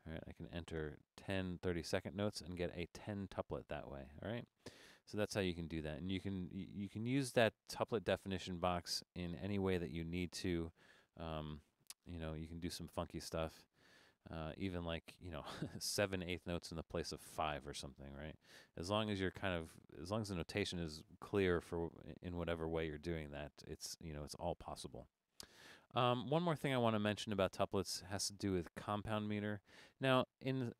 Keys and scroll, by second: 0.9 0, 6.9 Escape, 8.2 BackSpace, 11.3 alt+1.